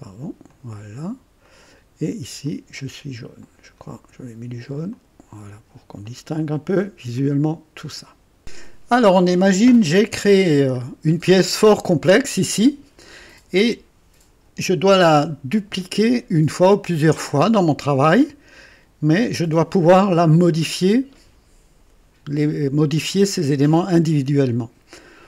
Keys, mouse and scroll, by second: 0.5 click, 1.5 click, 2.5 click, 3.4 click, 4.9 click, 6.1 click, 7.2 click, 7.9 click, 8.4 click, 10.8 scroll up 2, 18.0 right click.